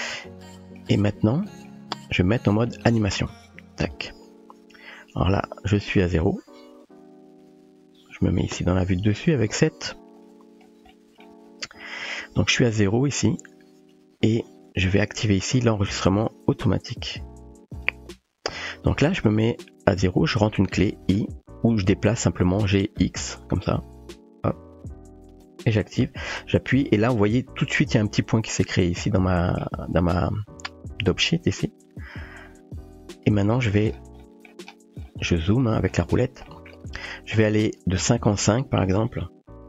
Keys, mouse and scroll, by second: 0.5-0.8 shift+middle drag, 0.5 typing, 1.5 shift+middle drag, 3.8 click, 6.3-6.8 drag, 9.0 KP_7, 10.9-11.3 shift+middle drag, 12.0 shift+middle click, 17.7 click, 22.7 g, 29.0-29.6 middle drag, 34.2 middle click, 35.6 click, 36.5 click, 37.8-39.6 drag.